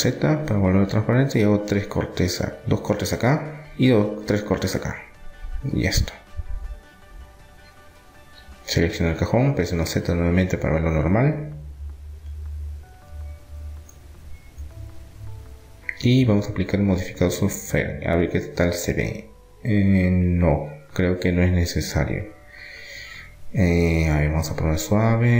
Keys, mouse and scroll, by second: 3.8 ctrl+r, 5.5-8.5 middle drag, 7.1 Tab, 9.2 z, 9.5 middle click, 14.8-16.8 middle drag, 16.8-18.8 drag, 18.8-21.2 middle drag, 24.0 click, 24.8-25.3 middle drag.